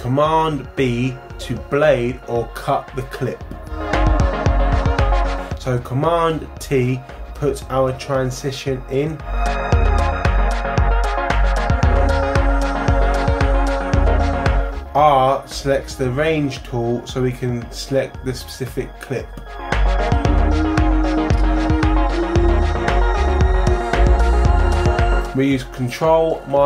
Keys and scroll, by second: 0.7 super+b, 6.8 super+t, 15.2 r, 26.2 ctrl+-.